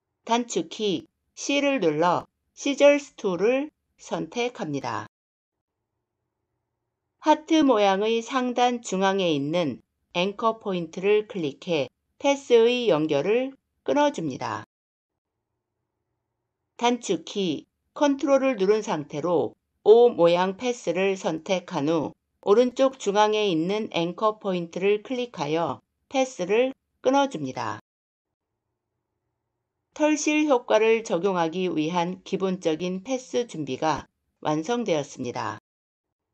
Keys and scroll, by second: 1.2 c.